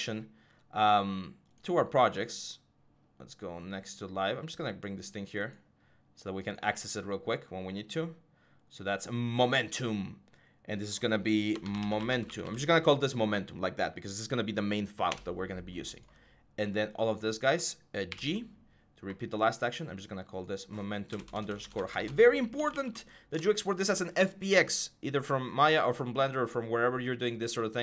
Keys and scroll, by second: 11.3-12.2 typing, 13.4 typing, 14.9 Return, 17.9 typing, 20.9-23.2 typing.